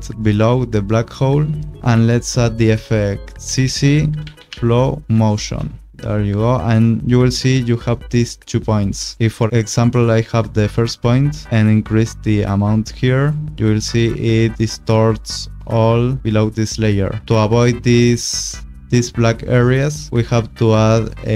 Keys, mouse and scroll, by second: 1.9 ctrl+space, 3.5-5.0 typing, 5.4 Return, 7.8 click, 12.5 click, 17.2 click, 19.1 click.